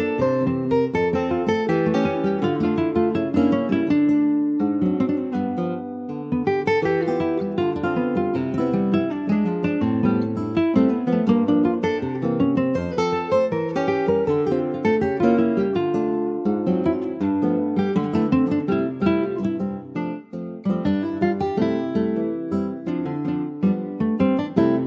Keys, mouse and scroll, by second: 0.2 shift+click, 0.6-1.6 middle drag, 1.6 ctrl+b, 3.6 Tab, 4.4 ctrl+a, 5.6 middle click, 6.0 Tab, 6.3 middle click, 7.0 ctrl+b, 12.2 click, 12.8 middle click, 13.1-13.5 scroll up 3, 13.5-15.5 shift+middle drag, 15.5-18.7 drag.